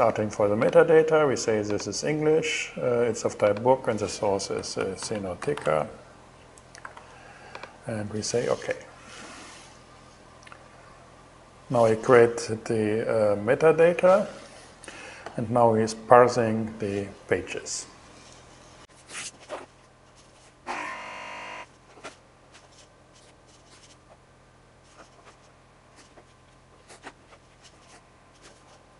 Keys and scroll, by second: 3.9-7.0 typing.